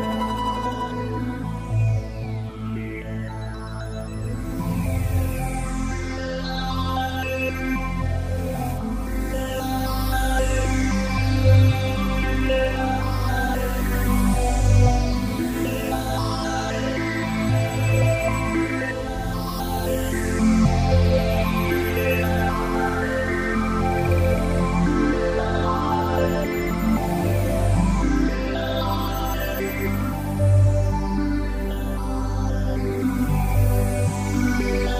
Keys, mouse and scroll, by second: 4.5 click, 5.9 click, 6.8-7.6 scroll up 5, 7.6 scroll down 5, 9.4 g, 18.6 click, 19.1-20.6 scroll up 7, 20.6-21.5 scroll up 1, 20.6 g, 25.1 click, 26.7 g, 28.3 click, 29.1-29.9 scroll down 7, 32.6 click, 33.5 click.